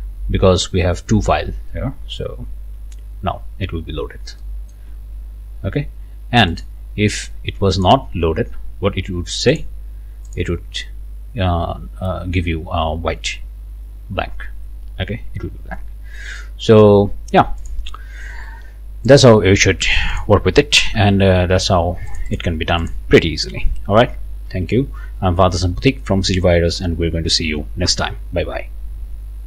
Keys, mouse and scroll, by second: 3.4 scroll down 1, 4.4 click, 6.5 click, 7.8 click, 10.3-12.0 drag, 13.6-14.0 scroll down 2, 15.7 scroll up 1, 16.2-17.3 drag, 17.6 click, 19.1-21.0 drag, 21.0 ctrl+x, 22.1 click, 22.8-24.5 scroll up 3, 24.5 ctrl+v.